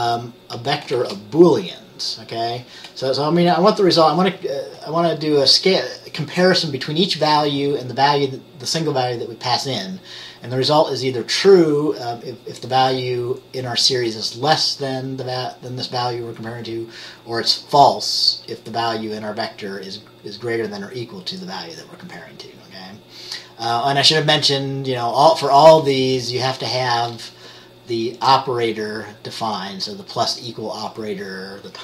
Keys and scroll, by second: 0.0-1.1 typing.